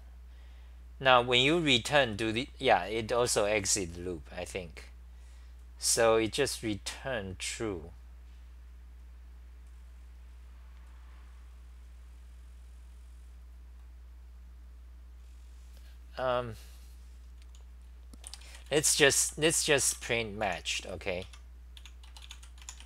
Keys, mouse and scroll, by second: 2.1 r, 18.3 p, 19.7-20.5 typing, 21.3 Home, 21.8-22.8 typing.